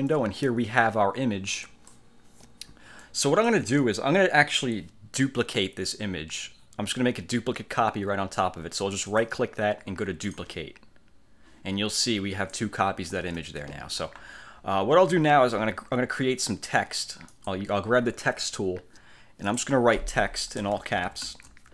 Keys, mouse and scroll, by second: 0.3-2.3 drag, 3.1 click, 9.3 click, 10.4 click, 12.1 click, 13.4 ctrl+z, 14.0-14.5 scroll down 2, 14.7-15.1 scroll up 1, 15.3 scroll down 1, 17.5 click, 19.6 click, 20.7-21.7 typing.